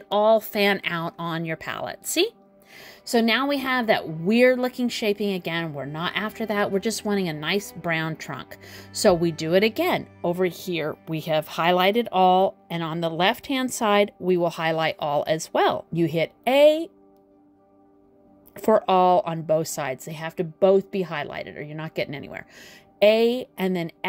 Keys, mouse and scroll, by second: 20.5 click, 21.3 a.